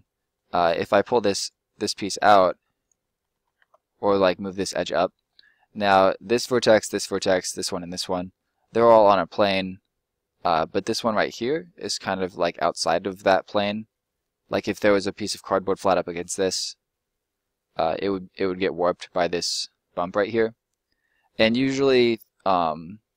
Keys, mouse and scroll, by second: 0.8 right click, 2.5 click, 3.0 middle click, 3.4 ctrl+middle click, 3.5 ctrl+z, 4.9 middle click, 5.2-5.5 scroll up 1, 5.5 middle click, 7.8 scroll up 1, 7.9 middle click, 11.6 middle click, 16.0 middle click, 19.4 middle click.